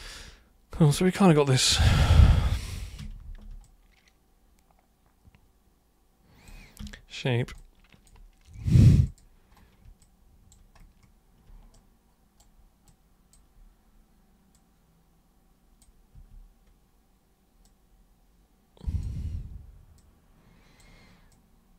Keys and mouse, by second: 0.1-2.0 alt+super+drag, 3.0 super+3, 3.7-6.5 alt+super+drag, 6.8 super+1, 7.6-8.0 alt+super+drag, 9.1 super+click, 10.1 alt+super+click, 11.7 super+right click, 12.8-13.3 super+drag, 14.6-15.8 super+drag, 16.2 e, 17.6-19.0 drag, 19.1 w, 20.0-20.8 drag, 21.3-21.7 drag.